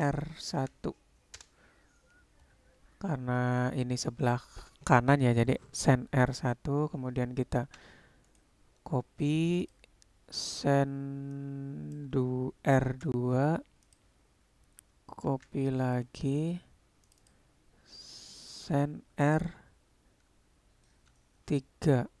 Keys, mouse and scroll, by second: 7.7 shift+d, 9.6 click, 9.7-14.0 drag, 15.4 shift+d, 17.3-22.2 drag.